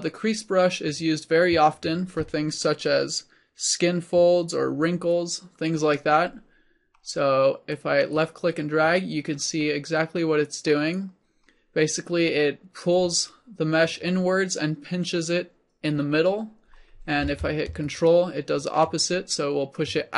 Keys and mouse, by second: 6.9 middle click, 7.8-17.2 drag, 17.9-19.6 drag.